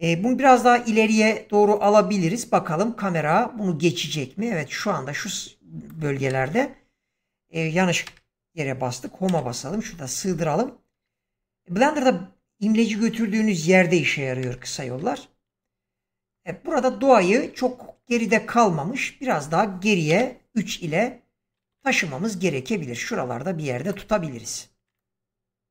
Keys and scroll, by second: 0.4 g, 6.3 0, 9.2 Home, 14.4 0, 20.1 3, 21.6 g.